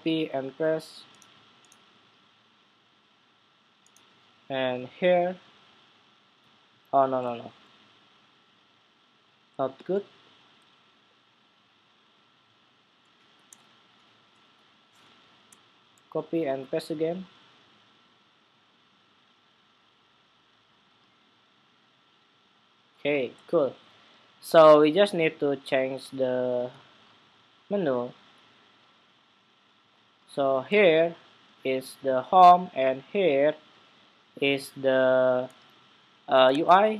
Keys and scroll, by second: 0.3 super+v, 15.7 super+c, 16.3 super+v, 36.2 super+Tab.